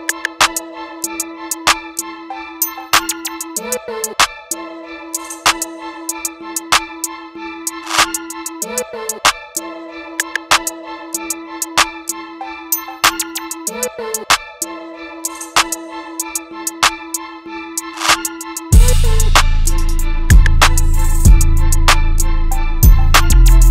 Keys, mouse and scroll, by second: 3.1 click, 6.1-10.3 drag, 13.8-21.3 drag.